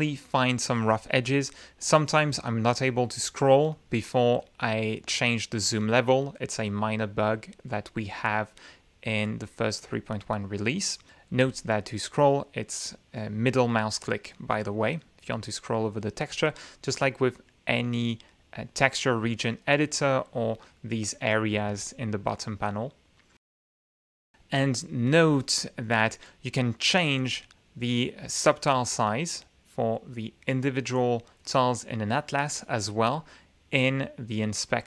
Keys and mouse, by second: 0.2 click, 1.1-1.6 middle drag, 1.6 click, 2.1 middle click, 2.4-2.9 middle drag, 3.7 click, 4.4 click, 5.7 click, 6.0-6.5 middle drag, 7.7 click, 8.1-9.7 middle drag, 12.4 click, 12.6-13.1 middle drag, 13.1 click, 13.3 middle click, 13.9 middle click, 14.2 click, 15.3 click, 16.3 click, 19.9 click, 22.0 ctrl+z, 25.7 click, 27.9 click, 32.1-32.7 middle drag.